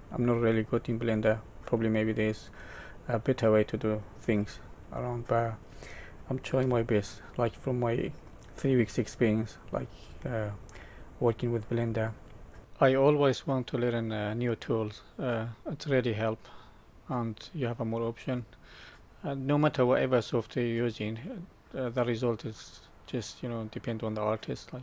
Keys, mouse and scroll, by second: 0.5 middle click, 4.9 middle click, 6.6 Tab, 7.0 middle click, 10.0-10.5 scroll up 3, 10.6 middle click, 12.6 scroll down 10, 12.8 middle click, 14.3 shift+middle click, 15.3 middle click, 16.1 middle click, 16.9-18.1 scroll up 3, 18.5 shift+middle click, 19.6 scroll up 2, 21.3 shift+middle click.